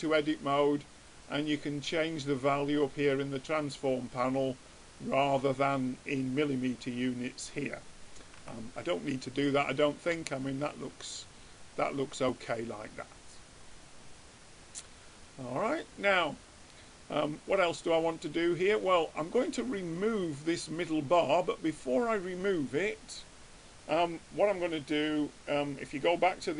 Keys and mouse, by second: 4.8-8.8 middle drag, 8.8 Tab, 17.7-19.5 middle drag, 20.1-21.6 drag, 23.4-25.1 middle drag.